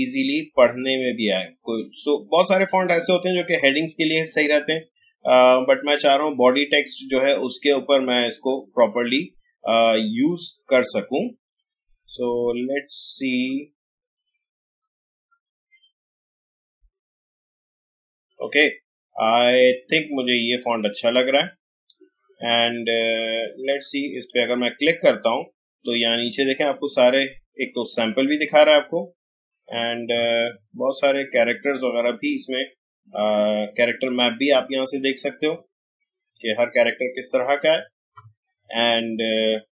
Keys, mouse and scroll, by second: 3.4 click, 6.0-15.9 drag, 24.1 click, 26.0 scroll down 1, 29.7 scroll up 1, 34.0 click, 36.2 scroll down 1, 37.7 scroll up 1.